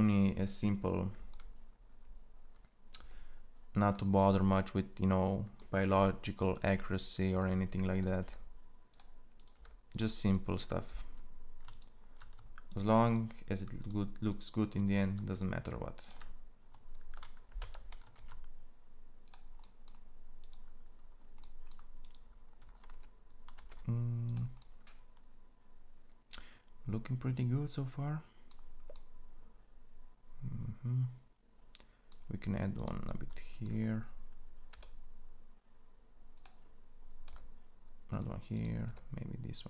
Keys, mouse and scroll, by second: 2.7 e, 7.0 e, 7.9 e, 9.2 e, 10.3-12.5 drag, 12.6-16.7 drag, 16.7 ctrl+e, 17.9 ctrl+a, 23.3 ctrl+a, 29.1-32.5 drag, 33.0-34.5 drag, 34.5 e, 37.0 e.